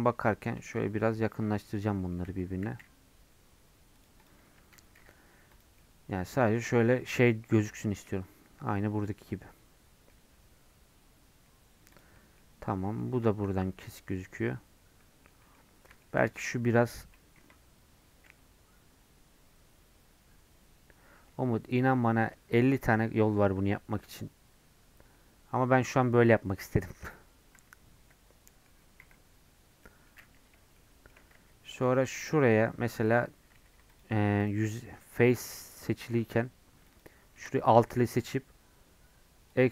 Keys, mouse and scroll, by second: 0.5-2.0 shift+scroll up 7, 2.0 shift+middle click, 2.5 g, 4.3 click, 4.4-4.8 scroll down 2, 4.6 Tab, 5.0 alt+z, 5.5 click, 5.8 middle click, 6.1 scroll down 1, 6.3 middle click, 6.8 scroll down 1, 7.4 scroll up 1, 7.8-11.5 shift+middle drag, 11.5-12.2 scroll down 2, 12.2 middle click, 12.4-12.7 scroll up 2, 12.7-16.3 middle drag, 16.3-17.4 drag, 17.4 KP_Decimal, 26.4-28.0 middle drag, 28.0 KP_Decimal, 28.5 middle click, 29.0 KP_Decimal, 29.9 middle click, 30.2-30.8 scroll up 2, 30.8 shift+middle click, 31.3 Tab, 33.2 alt+click, 33.6 3, 34.0 alt+click, 39.6 alt+e.